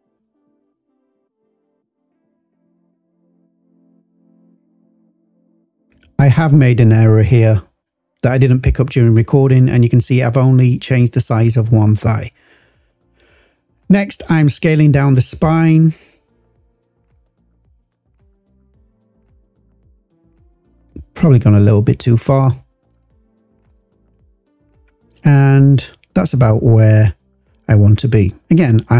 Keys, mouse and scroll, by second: 1.1 click, 2.0 s, 2.7 y, 3.9 click, 4.6 click, 5.0 scroll up 2, 5.9 click, 6.8-7.1 scroll up 1, 9.7 click, 10.5 s, 17.1 click, 17.7 click, 18.4 s, 19.6 click, 19.8 s, 25.3 click, 25.5-26.9 scroll down 3, 26.9-27.9 scroll up 2, 27.9 click, 28.0 click, 28.3 s.